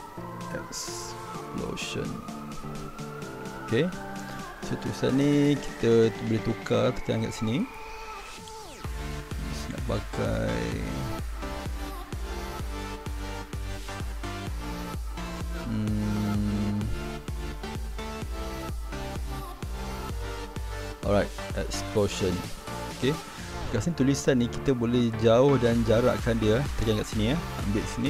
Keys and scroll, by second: 0.0-3.2 typing.